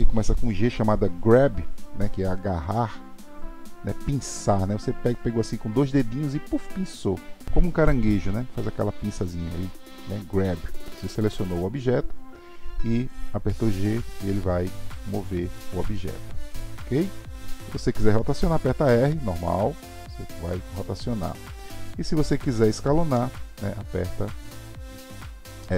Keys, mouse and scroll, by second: 13.6 g, 19.4 r, 23.1 s.